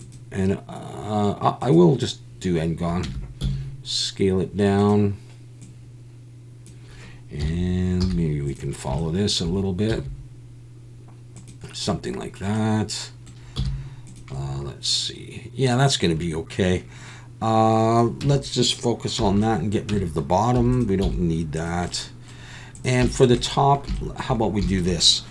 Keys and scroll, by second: 3.0 Tab, 3.4 s, 7.4 KP_1, 8.0 z, 9.9 s, 13.6 z, 18.2 Tab, 19.2 /, 19.9 Tab, 20.5 3, 21.0 x.